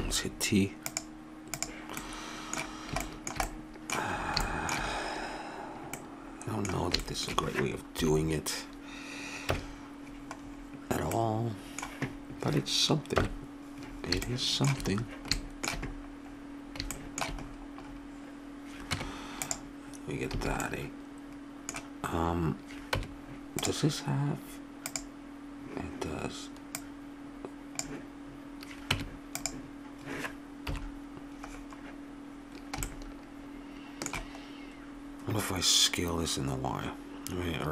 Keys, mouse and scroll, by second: 0.0 t, 0.9 click, 2.0-6.2 middle drag, 8.0 KP_7, 9.5 KP_Decimal, 11.3 middle click, 13.1 KP_1, 16.8-18.9 middle drag, 18.9 Tab, 20.4 a, 20.6-22.6 middle drag, 23.0 Tab, 24.9-26.7 drag, 27.0-28.7 drag, 28.9 Tab, 30.7 KP_7, 32.9 middle click, 33.5 middle click.